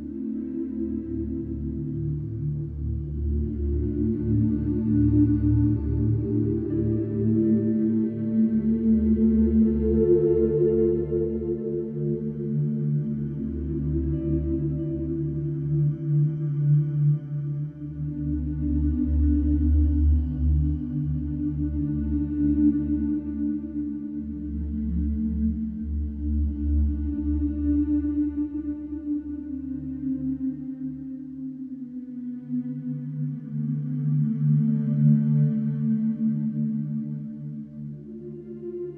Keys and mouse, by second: 3.1 shift+b, 3.2 c, 3.4 Return, 9.3 shift+middle click, 11.2 shift+click, 11.3 shift+middle click, 13.0 ctrl+a, 24.5 middle click, 25.7-28.7 shift+middle drag, 28.7-33.2 drag, 28.7-29.3 typing, 29.5 Return, 33.2-33.6 middle drag, 34.2 KP_1, 35.8 alt+z, 38.2 shift+click.